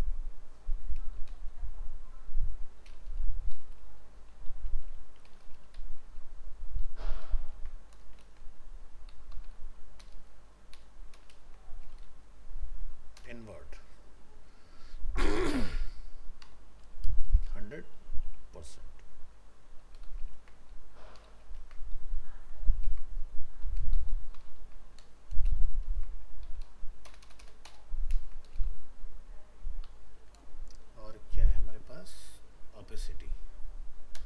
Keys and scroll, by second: 1.2 ctrl+shift+Left, 7.5 ctrl+c, 8.2 ctrl+v, 10.0 ctrl+BackSpace, 11.3 ctrl+space, 20.1 ctrl+shift+Left, 20.3 ctrl+c, 21.3 ctrl+shift+Left, 21.6 ctrl+v, 24.6 ctrl+c, 25.4 ctrl+v, 27.1 ctrl+BackSpace, 28.1 ctrl+space.